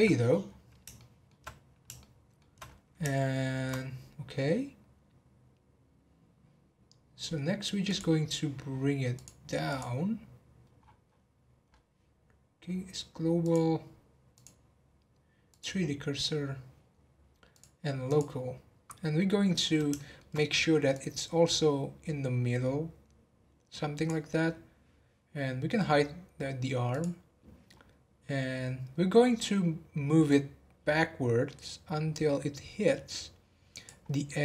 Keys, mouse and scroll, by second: 0.1-0.4 scroll down 3, 0.9-1.5 shift+middle drag, 1.5-2.0 scroll down 1, 2.0-2.6 shift+middle drag, 2.6 scroll up 3, 3.1-3.8 shift+middle drag, 3.8 scroll up 2, 7.8-9.2 drag, 9.6 click, 10.8-11.1 scroll down 10, 11.6 scroll up 1, 14.3-17.4 drag, 17.5-18.4 drag, 18.4-19.2 scroll up 2, 19.2-19.9 scroll up 2, 19.9 shift+middle click, 20.9 click, 25.7-26.3 scroll up 1, 26.9 click, 27.7-28.9 scroll down 1, 28.9-29.4 scroll up 3, 29.4-29.8 scroll down 1, 30.2 click, 34.0-34.4 scroll up 1.